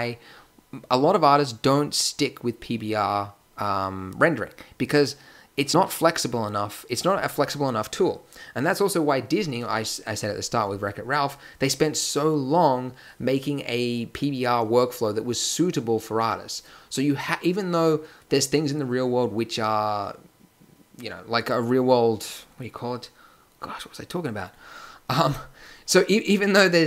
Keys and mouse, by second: 25.2-26.8 drag.